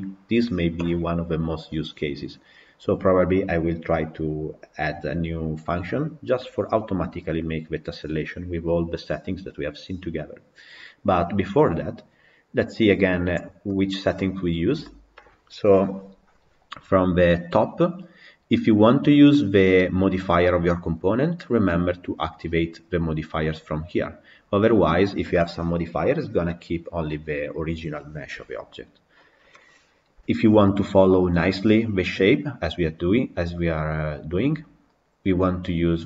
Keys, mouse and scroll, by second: 13.5-24.8 middle drag, 24.8-26.6 scroll down 4, 26.6-28.7 scroll up 3, 28.7-30.6 scroll up 1, 30.6-36.0 middle drag.